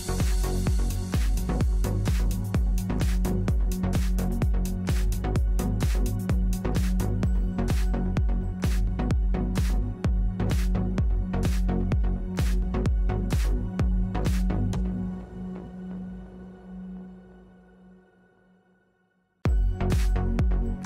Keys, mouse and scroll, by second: 5.4-8.2 middle drag, 6.5 k, 13.5-17.6 middle drag, 17.7-20.2 middle drag.